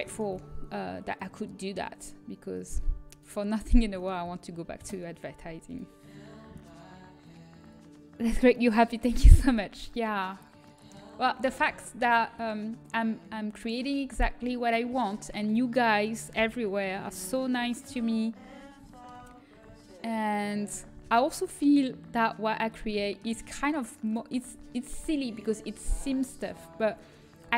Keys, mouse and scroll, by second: 0.0-2.8 drag, 1.0-2.3 right drag, 3.0-4.7 drag, 3.5 a, 4.7 Delete, 4.9-7.4 drag, 10.0 middle click, 11.1 middle click, 11.5 a, 12.0-13.1 middle drag, 13.7 middle click, 17.2 l, 17.8 KP_1, 21.2 shift+d, 23.9-25.6 drag, 25.6-26.6 middle drag.